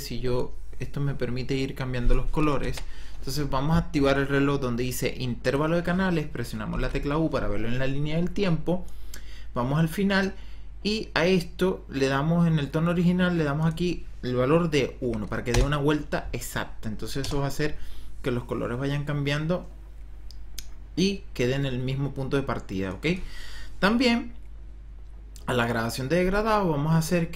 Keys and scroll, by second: 2.8 ctrl+z, 6.6 u, 14.9 KP_1, 15.4 Return, 17.1 KP_0, 26.1 ,.